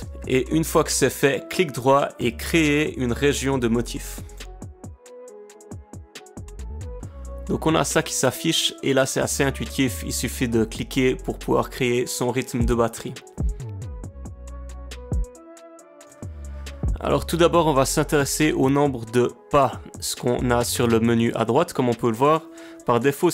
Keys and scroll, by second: 13.3 space, 21.2 space.